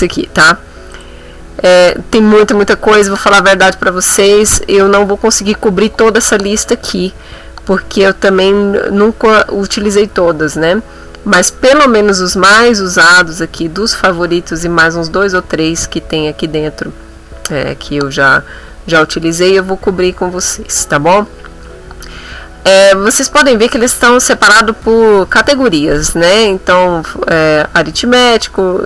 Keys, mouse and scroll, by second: 0.9 click, 10.0-10.3 scroll up 2, 10.6-11.1 scroll up 2, 11.2-11.9 scroll up 4, 22.5-22.9 scroll up 2.